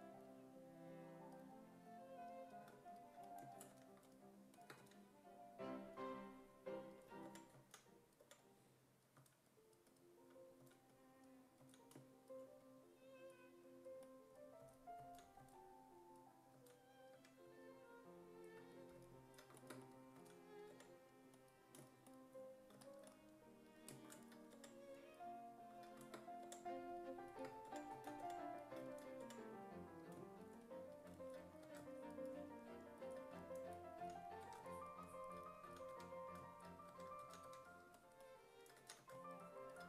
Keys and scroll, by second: 3.7 w, 4.8 w, 7.3 5, 7.6 s, 8.2 5, 9.2 s, 10.6 s, 11.6 s, 14.6 s, 15.0 s, 15.4 s, 16.6 s, 17.2 1, 20.2 s, 20.7 5, 24.6 5, 26.5-29.3 typing, 31.7 1, 34.0-39.8 typing.